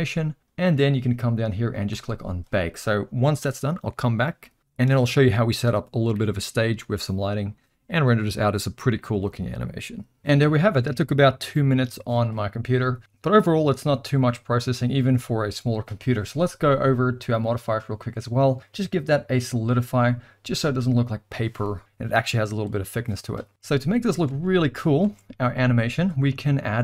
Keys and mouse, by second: 2.0-12.5 drag, 13.0 middle click, 17.4 click, 18.4-19.6 drag, 24.3 alt+a, 25.0 space.